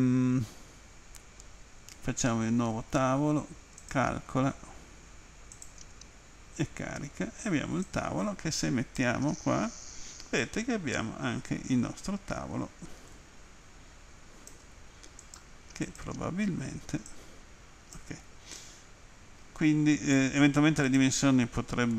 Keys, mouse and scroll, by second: 3.9 click, 5.6 click, 7.9 click, 10.4 alt+click, 15.2 right click, 15.9 click, 17.1 click, 18.6 alt+click, 20.9 click.